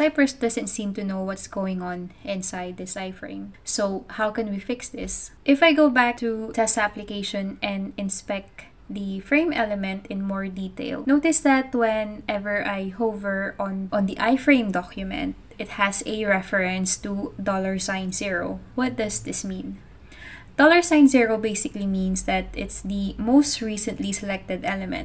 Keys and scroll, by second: 22.5-24.3 typing.